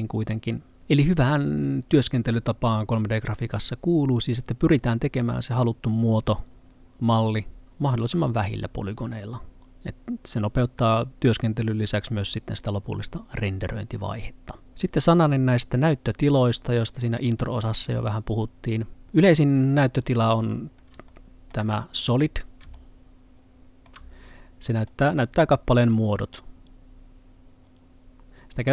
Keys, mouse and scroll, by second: 21.1 Pause, 21.2 middle click, 21.9-22.8 scroll up 1, 22.8 middle click.